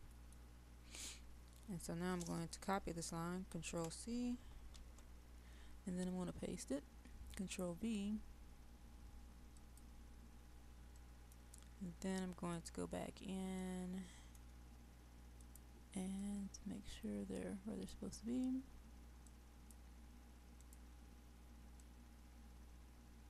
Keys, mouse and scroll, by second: 9.5 click, 11.0 middle click, 11.6-12.2 scroll down 1, 12.2 middle click, 13.2-13.6 scroll down 1, 13.6 middle click, 15.4-23.2 drag.